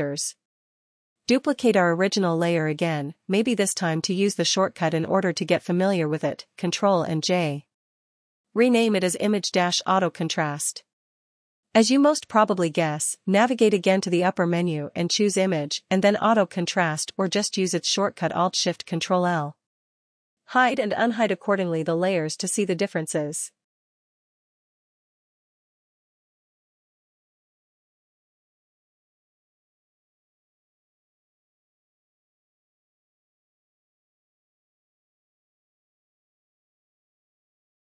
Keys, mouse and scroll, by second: 4.5 click, 5.3 right click, 5.3 click, 7.1 click, 8.9 ctrl+j, 10.5 click, 10.7 click, 11.8-13.3 typing, 21.6 Return, 21.6 click, 23.3 click, 25.7 click, 27.3 click, 28.6 click, 29.6 click, 30.8 click, 32.9 click, 34.8 click, 35.7 click, 37.1 click.